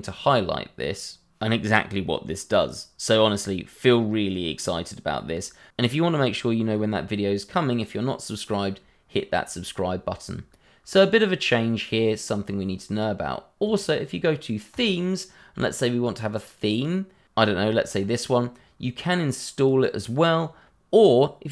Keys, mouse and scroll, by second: 13.6 click, 19.5 click.